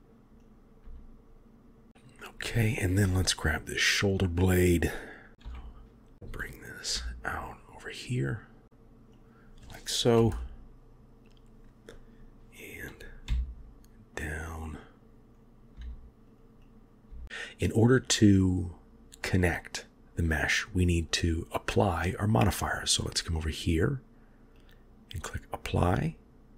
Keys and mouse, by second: 0.7 click, 0.9 g, 2.2 middle click, 3.8 click, 4.9 click, 5.5 KP_7, 7.0 g, 10.4 KP_1, 13.3 g, 15.5 click, 15.8 g, 16.8 click, 18.0 click, 23.5 click, 24.6-25.4 drag.